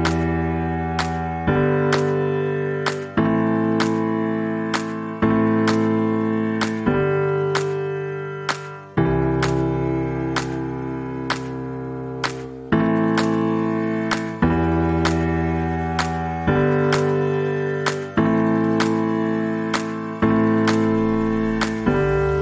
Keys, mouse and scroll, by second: 0.3 ctrl+scroll down 1, 1.8 ctrl+scroll down 1, 4.0-4.5 ctrl+scroll down 1, 4.5 z, 5.8-6.8 alt+drag, 8.2 p, 9.4 click, 21.9 ctrl+shift+v.